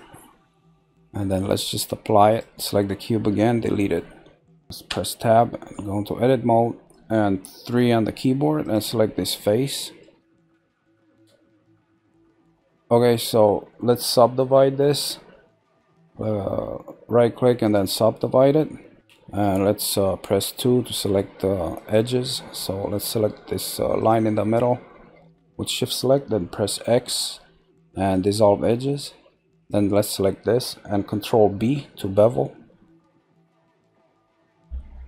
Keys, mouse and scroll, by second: 1.4 click, 2.3 click, 3.3 Delete, 4.0 middle click, 4.9 Tab, 5.3 middle click, 5.9-6.5 scroll up 2, 6.5-7.6 shift+middle drag, 7.6 3, 8.6 click, 9.1-12.1 middle drag, 12.6-14.2 middle drag, 15.7-18.9 right drag, 20.4 2, 21.8 click, 24.0 shift+click, 25.2-26.7 middle drag, 26.7 x, 29.6 click, 31.4 ctrl+b.